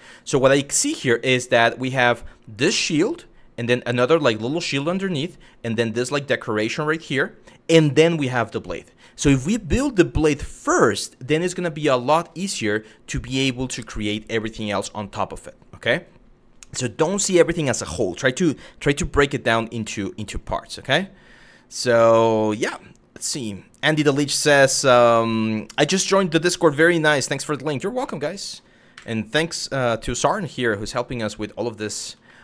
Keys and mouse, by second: 0.4 shift+middle drag, 1.6 shift+middle drag, 22.3 KP_1, 27.6-28.2 middle drag, 28.6 KP_1, 29.6 shift+middle drag, 30.4 shift+middle drag, 31.1 shift+middle drag, 31.9 shift+middle drag.